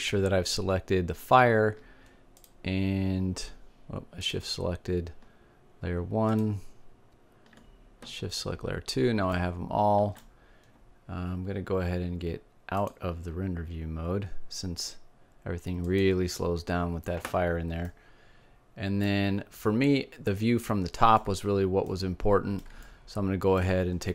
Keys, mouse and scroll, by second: 2.5-4.2 drag, 5.4 click, 7.3-8.7 drag, 10.5-11.9 middle drag, 13.9-16.2 drag, 18.0-20.2 middle drag, 20.9-23.6 middle drag.